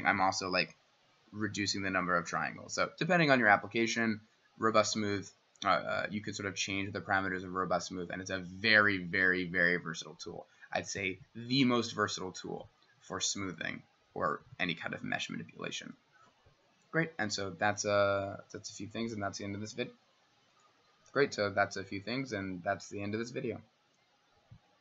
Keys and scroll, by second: 0.7 w.